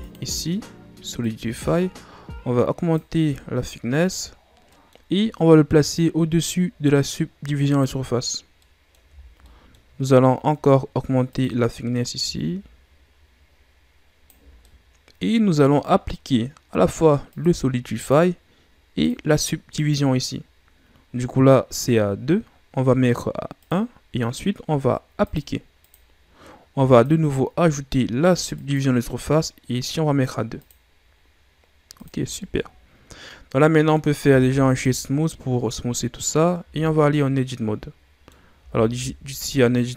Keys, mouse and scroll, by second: 4.7-5.8 middle drag, 5.8-7.8 drag, 8.5 middle click, 9.2 shift+scroll down 2, 9.4-9.8 middle drag, 9.8-11.3 scroll up 2, 11.3-14.6 drag, 14.6 middle click, 15.2-17.3 middle drag, 17.3-22.7 drag, 23.6-29.9 drag, 30.5-32.3 drag, 32.3-34.2 middle drag, 34.2 w, 35.7-36.6 middle drag, 36.6 Tab, 37.1-38.5 middle drag, 38.5 a, 38.9 a.